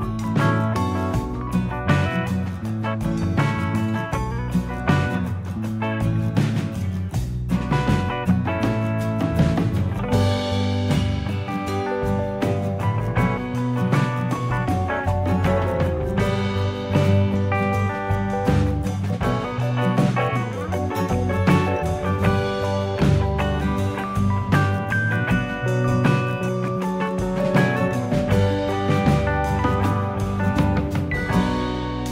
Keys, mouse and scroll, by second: 1.9 scroll down 1, 5.7 shift+middle click, 6.2-6.9 scroll up 6, 7.2 shift+middle click, 7.8 click, 8.6 click, 9.2 scroll down 4, 9.6 shift+middle click, 10.7 shift+middle click, 11.5 scroll up 1, 11.6-12.2 scroll down 1, 12.4 click, 15.2-15.8 scroll down 3, 16.4 shift+s, 18.1 scroll down 2, 18.5 shift+a, 20.2 click, 22.5 click, 23.2 scroll up 2, 23.7 shift+a, 26.3 click, 31.4 click, 31.8-32.1 scroll down 7.